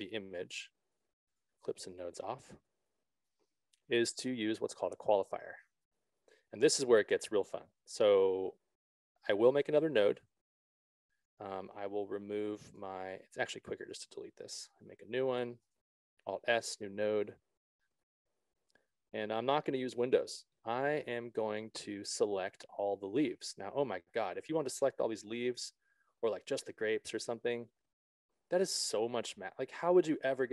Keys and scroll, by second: 6.2 s, 14.9 BackSpace, 16.7 alt+s.